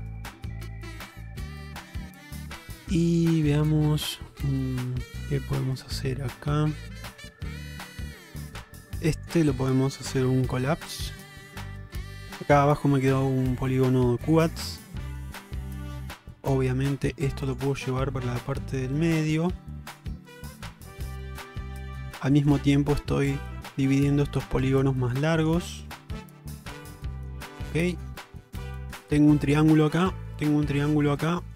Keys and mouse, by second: 1.8-2.3 middle drag, 3.3-4.1 middle drag, 5.4-7.7 middle drag, 10.3 m, 11.6 middle click, 13.5 shift+middle click, 14.6 middle click, 16.3 k, 20.3-26.4 middle drag, 27.0-27.4 middle drag, 27.6 shift+middle click, 28.0 middle click, 28.6 shift+middle click, 30.0 middle click, 31.1 middle click.